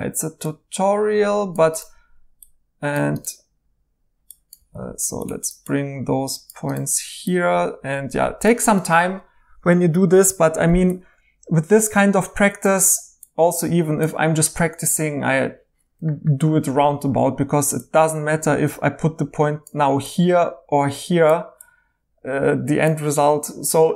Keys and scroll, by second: 4.6 g.